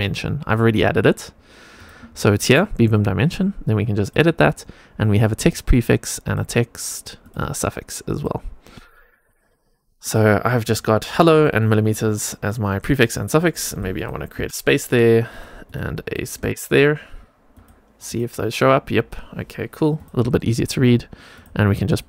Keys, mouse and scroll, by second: 0.4 click, 1.7 click, 3.9 click, 5.3 click, 7.1-10.0 drag, 13.6-15.2 drag, 15.6-17.5 drag, 18.0 click, 19.9 click, 21.3 click, 21.8 click.